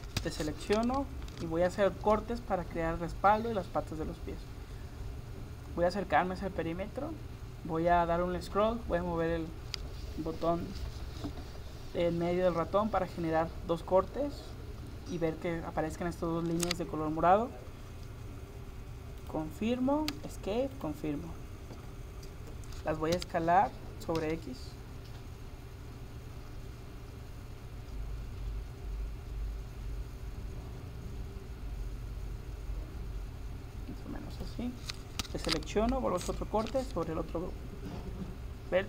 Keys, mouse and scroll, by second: 0.2 a, 1.3 ctrl+r, 20.8-22.6 right drag, 23.2 s, 35.3 a, 36.3 ctrl+r.